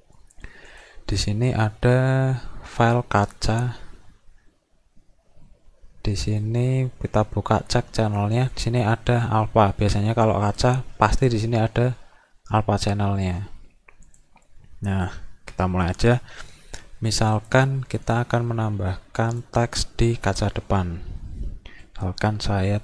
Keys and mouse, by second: 0.7 click, 6.3-7.5 drag, 8.5 click, 10.5 click, 14.1 click, 14.9 click, 17.4 click, 19.3 click.